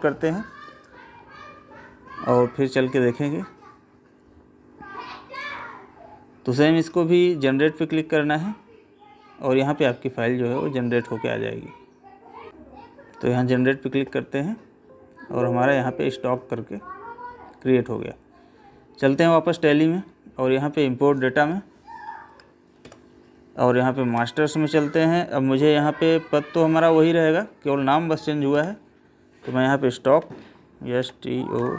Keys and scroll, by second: 22.3 Up, 28.5 Left.